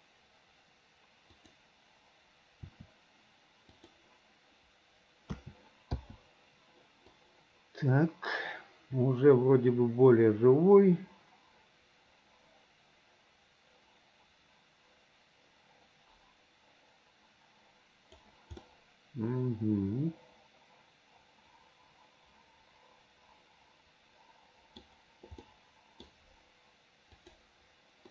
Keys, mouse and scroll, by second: 1.4 click, 2.6 r, 5.4 a, 6.0 i, 7.2-18.2 drag, 18.6-24.9 middle drag, 25.4 middle click, 27.2 click.